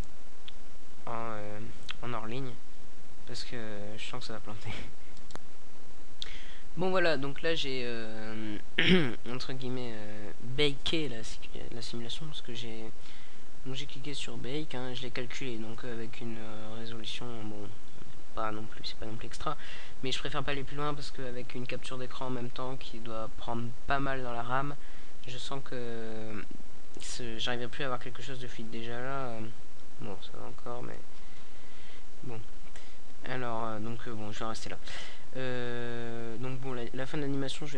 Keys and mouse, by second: 18.3 middle click, 19.0 middle click, 20.0 KP_Decimal, 20.9 KP_0, 29.9-33.6 drag, 33.6-35.8 middle drag, 35.8 right click, 36.6-37.7 drag.